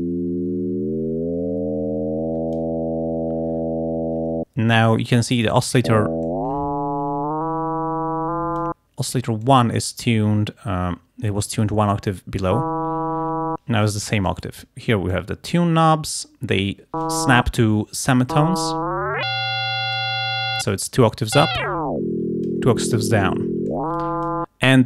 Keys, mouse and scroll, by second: 2.6 click, 6.3 click, 8.3 click, 9.5-11.7 drag, 14.3 click, 15.2-17.3 drag, 18.7-20.2 drag, 21.6-22.7 drag, 23.8 click.